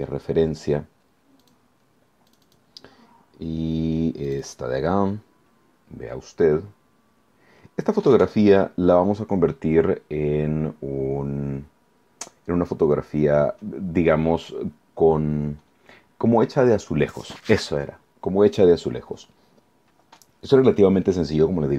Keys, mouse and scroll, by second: 1.4 click, 2.3 click, 4.2-5.5 drag, 7.0 scroll down 1.